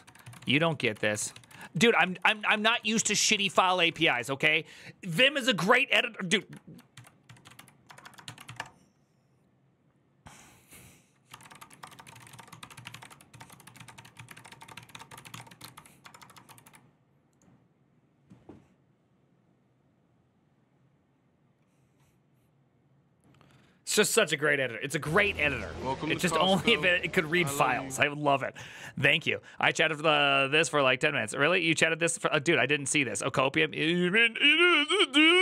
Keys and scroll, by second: 0.0-4.2 typing, 6.7 alt++, 6.7 ctrl+t, 6.8-8.7 typing, 10.8-16.9 typing.